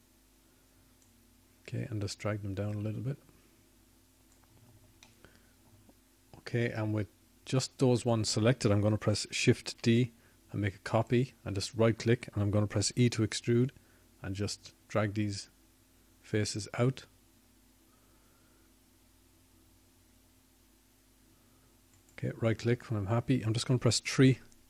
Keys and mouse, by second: 1.2-2.8 drag, 8.1-9.7 drag, 15.9 shift+d, 19.1 e.